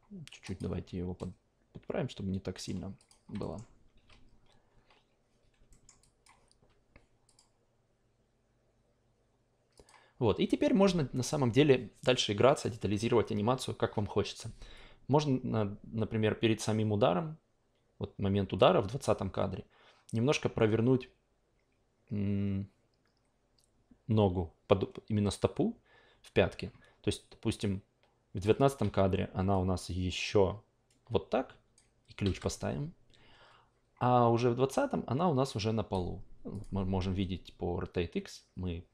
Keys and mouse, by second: 0.4-1.2 drag, 2.6 middle click, 3.0 click, 3.4-5.3 alt+middle drag, 5.7 alt+middle drag, 6.0 alt+click, 7.2 click, 9.7 click, 14.7-22.3 drag, 27.6-28.4 drag, 28.6 e, 29.5-31.7 drag, 32.2 s, 34.6-36.0 drag, 36.5 click.